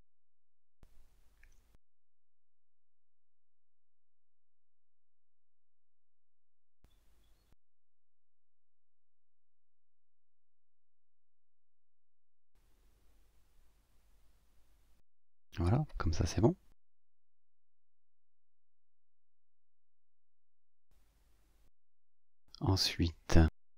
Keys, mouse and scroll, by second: 1.0-3.1 drag, 3.4-4.5 ctrl+shift+drag, 4.9-7.3 drag, 8.7 ctrl+d, 9.4-12.0 ctrl+drag, 12.5-15.6 drag, 16.0 click, 18.0-18.4 scroll up 2, 18.4 scroll down 1, 23.3 scroll up 2.